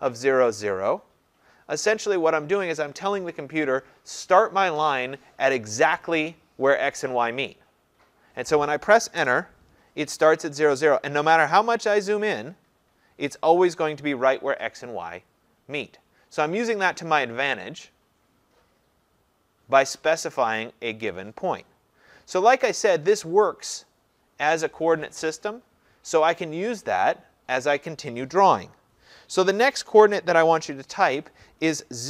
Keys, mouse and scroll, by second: 9.2 Return, 10.8 scroll, 11.6-12.8 scroll, 13.3-14.4 scroll down 8, 14.7-16.6 scroll up 21, 17.4 scroll, 18.6-21.6 scroll, 21.8-22.4 scroll, 22.4 scroll, 23.4-23.7 scroll, 24.1-27.6 scroll.